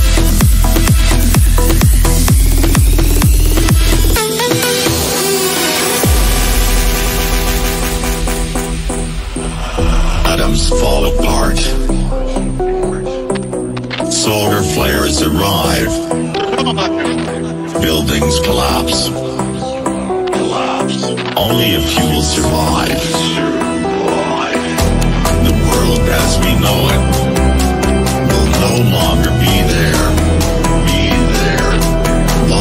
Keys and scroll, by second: 4.5 KP_Add, 5.3 Down, 10.0 Down, 13.3 Delete, 17.2 F3, 24.5 ctrl+r.